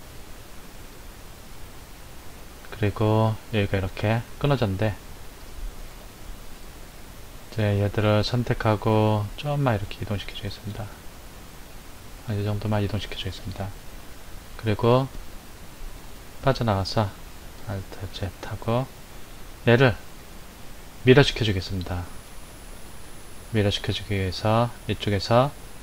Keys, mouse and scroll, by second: 2.9-5.9 middle drag, 5.9 KP_1, 7.6 click, 9.9 click, 13.0 click, 15.9 Tab, 17.7 alt+z, 20.2-22.7 middle drag, 22.7 KP_1.